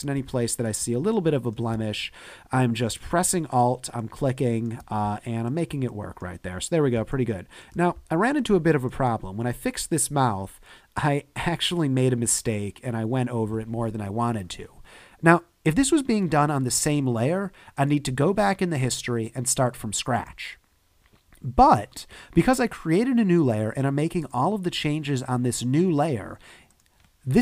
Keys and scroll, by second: 1.7 space, 7.0 space.